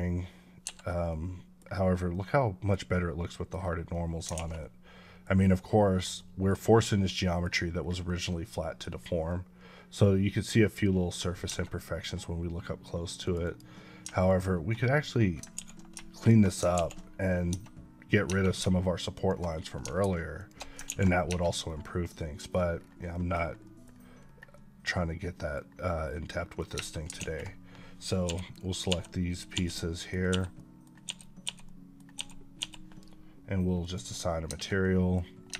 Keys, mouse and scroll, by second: 0.5 Escape, 1.2-1.6 middle drag, 3.8 middle click, 4.2 alt+a, 4.5 middle click, 5.2-5.8 scroll up 2, 6.0-6.7 middle drag, 6.9-7.6 middle drag, 7.6 scroll down 1, 7.9-8.8 middle drag, 8.8 scroll up 2, 9.1 middle click, 10.8 KP_Decimal, 11.3 Tab, 13.1 click, 13.3 double click, 14.1 alt+click, 15.6 x, 16.0 click, 17.4 Tab, 19.0 click, 20.2 alt+shift+click, 20.7 ctrl+x, 21.5 middle click, 22.6-23.0 scroll down 1, 23.0 middle click, 23.3 scroll down 1, 23.5 middle click, 24.4 middle click, 25.9 middle click, 26.6 Tab, 27.0 alt+a, 28.1 l, 29.9 middle drag, 30.7 middle drag, 31.5-32.0 middle drag, 32.8 l, 33.7 click, 34.3 Tab, 34.7 middle click, 35.1 scroll down 1, 35.4 Tab.